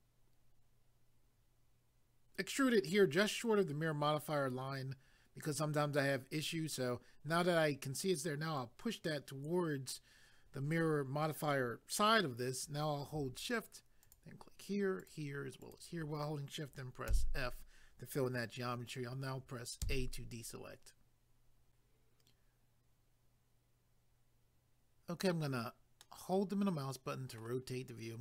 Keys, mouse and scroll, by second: 8.6 click, 14.0 shift+click, 15.0 shift+click, 17.1 f, 19.8 a, 21.7 click, 26.0 middle click, 27.7 scroll down 1.